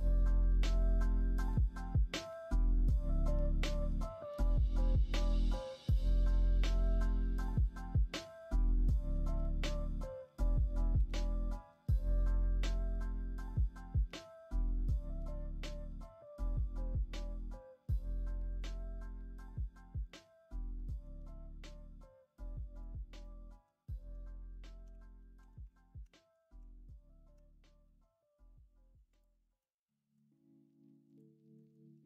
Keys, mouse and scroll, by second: 1.7 s, 10.2 g, 20.8 middle drag, 23.2-24.1 middle drag, 23.2-23.6 scroll up 1, 23.6 scroll down 1, 23.8 scroll up 1, 24.0 scroll down 1, 24.8 g, 29.5-30.1 middle drag, 29.5-30.1 scroll up 1, 31.6 middle click.